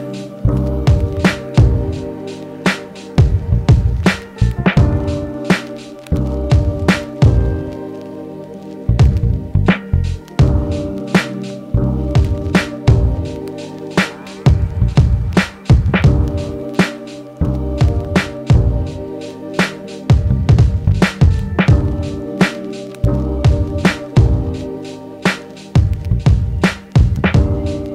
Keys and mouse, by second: 0.8 ctrl+z, 7.7-27.9 drag, 12.8 ctrl+z.